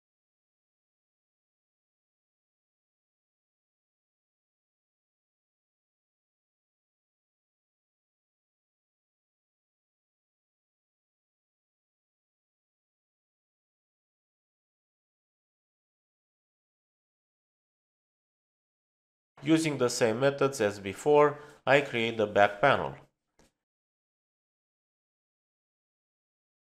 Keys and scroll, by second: 12.8 space.